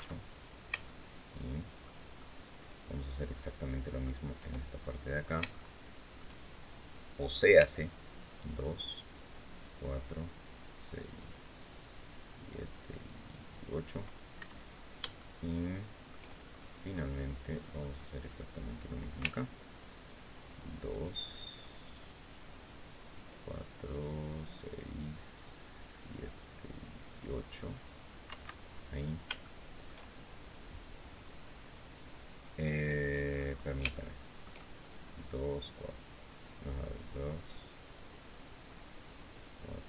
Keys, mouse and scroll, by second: 0.0-0.4 scroll down 2, 0.6-1.7 shift+middle drag, 1.9-3.9 shift+middle drag, 4.6-5.1 shift+scroll up 1, 5.3 shift+middle click, 7.3 c, 7.9 click, 9.3 click, 10.4 click, 10.9 click, 11.5 click, 12.0 click, 13.2 click, 14.1 Escape, 14.4-14.8 scroll down 2, 14.9-16.0 shift+middle drag, 16.2-16.6 shift+scroll up 3, 18.9 c, 19.7 click, 20.6 click, 21.6 click, 22.9 click, 24.0 click, 24.9 click, 25.6 click, 26.8 click, 27.4-27.8 scroll down 1, 28.0 Escape, 28.3-28.7 scroll down 1, 29.1 shift+middle click, 33.0-33.4 scroll up 2, 33.6 shift+middle click.